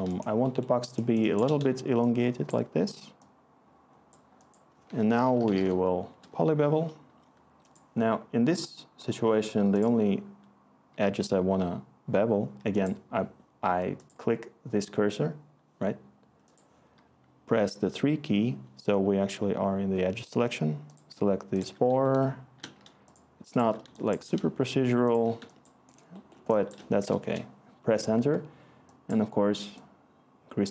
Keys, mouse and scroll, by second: 4.6-6.0 typing, 6.1 Return, 11.0 3, 17.8 3, 27.2 Return.